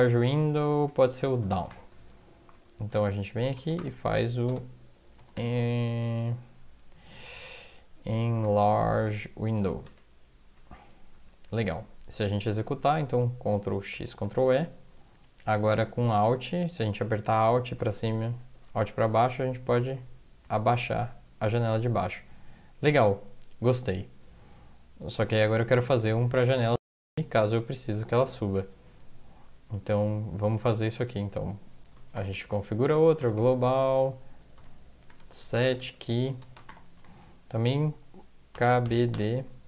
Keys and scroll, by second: 1.0-2.2 typing, 2.3 Right, 2.5 Right, 2.9 Right, 3.6-5.9 typing, 8.5 typing, 9.9 Tab, 11.1 End, 11.1 typing, 13.9 ctrl+x, 14.3 ctrl+e, 19.5 alt+Down, 20.0 alt+Down, 20.4 alt+Down, 21.0 alt+Down, 25.8 shift+Home, 26.5 ctrl+c, 26.8 End, 30.0 Down, 32.1-39.6 typing, 32.7 Left.